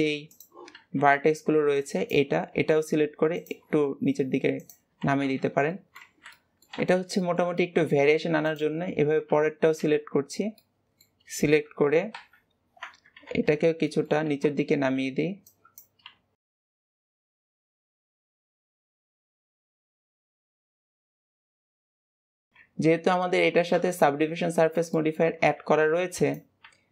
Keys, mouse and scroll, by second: 0.2 click, 0.6 alt+a, 5.2 Tab, 5.6-6.0 middle drag, 6.0 alt+z, 6.2-6.7 middle drag, 6.7 alt+z, 7.0-8.3 shift+middle drag, 8.3 click, 9.2 KP_1, 9.6 Tab, 10.4-12.0 middle drag, 12.0 ctrl+KP_3, 13.2 alt+z, 13.7 shift+middle click, 14.1 alt+a, 14.6 b, 18.1 shift+middle click, 18.4 Tab, 18.8 alt+a, 18.9 b, 21.7 click, 22.0 click, 22.1 alt+z, 22.4 KP_3, 22.8 Tab, 23.6 KP_1, 24.8 shift+middle click, 25.5 alt+a, 25.8 b.